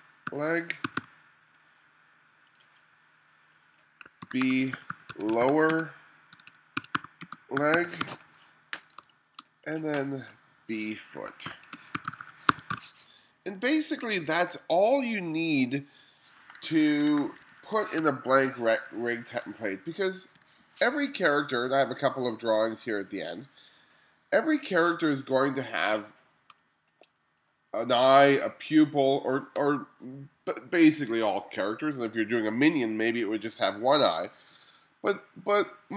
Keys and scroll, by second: 0.0-1.5 typing, 4.0-9.0 typing, 11.3-13.8 typing, 16.7 1, 18.0 space, 20.4 BackSpace, 24.5 BackSpace, 26.6 space.